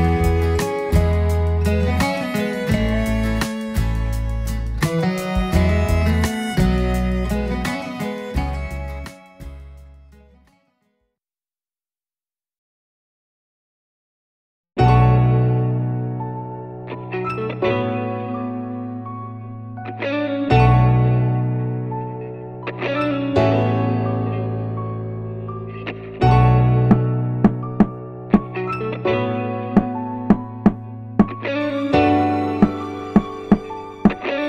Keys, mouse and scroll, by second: 1.0-1.4 scroll down 2, 1.6-2.0 middle drag, 2.3 click, 3.4 shift+d, 3.6 x, 4.7 click, 7.1-8.1 drag, 8.8 click, 10.0 click, 10.5-11.5 drag, 12.2-14.0 middle drag, 15.4 click, 16.4 click, 16.7 click, 18.1 click, 18.7 click, 20.5-21.1 drag, 21.8 click, 22.3-27.0 drag, 27.3-28.2 middle drag, 28.7 scroll up 1, 29.1-30.0 middle drag, 31.7-34.2 drag.